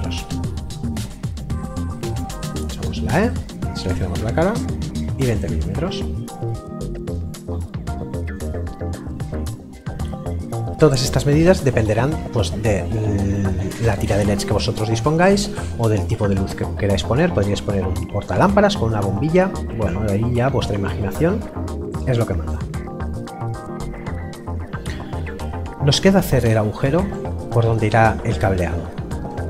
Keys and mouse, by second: 0.2 Return, 0.9 middle click, 2.6 e, 3.3 click, 4.3 KP_2, 4.9 Return, 5.8 middle click, 22.5 middle click.